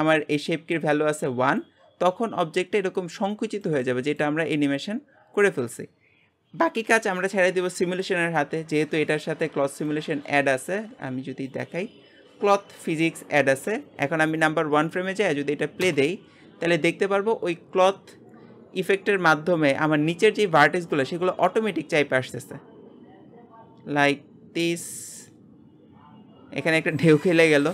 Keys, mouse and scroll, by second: 13.6 click, 14.4-15.8 drag, 15.8 space, 22.2-23.5 scroll down 2, 23.5-24.5 scroll up 1.